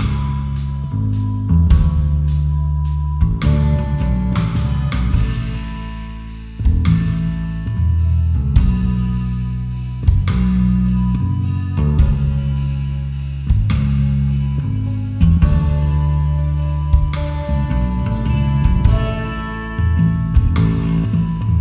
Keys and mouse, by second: 0.4 alt+shift+click, 1.7 alt+shift+click, 3.3 alt+shift+click, 3.8 alt+shift+click, 4.7 alt+shift+click, 5.5 alt+shift+click, 5.7 alt+shift+click, 6.6 alt+shift+click, 9.7 alt+shift+click, 10.4 alt+shift+click, 13.4 alt+shift+click, 14.9 alt+shift+click, 15.2 alt+shift+click, 15.9 alt+shift+click, 16.4 alt+shift+click, 17.9 alt+shift+click, 18.8 alt+shift+click, 19.1 alt+shift+click, 20.4 alt+shift+click.